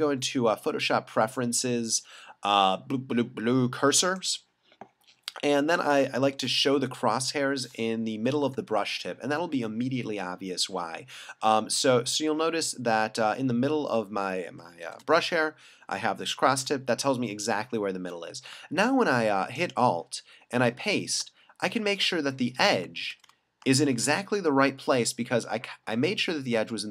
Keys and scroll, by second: 6.2 alt+super+=, 8.5 alt+super+-, 14.8 alt+super+=, 17.4 alt+super+-, 23.8 alt+super+=.